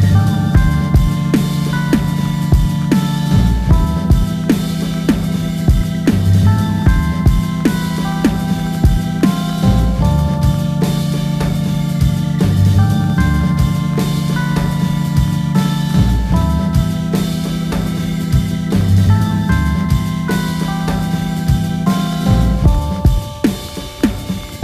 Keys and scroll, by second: 4.1 F2, 5.5 Down, 7.0 Return, 14.4 Return, 16.4 Return.